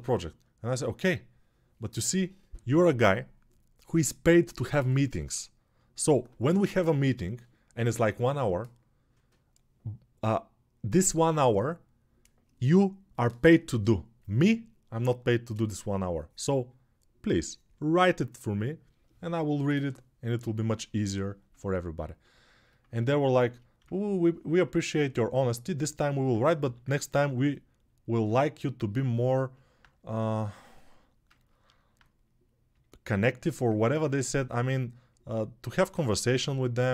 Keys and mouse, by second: 26.4 g.